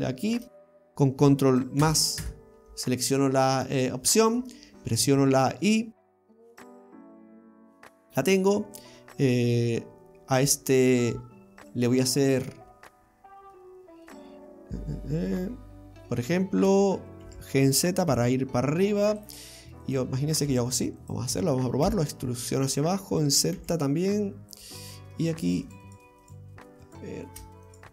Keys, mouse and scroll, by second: 1.9 ctrl+KP_Add, 2.2 ctrl+KP_Add, 3.6-4.2 scroll down 1, 4.2 middle click, 7.1 y, 7.5 click, 13.6 middle click, 17.3 g, 19.9 right click, 20.5 alt+shift+right click, 20.7 alt+shift+right click, 21.0 alt+shift+right click, 22.0 e, 25.3 right click, 25.7 alt+shift+right click, 25.9 alt+shift+right click, 26.3 alt+shift+right click, 26.9 right click, 27.7 right click.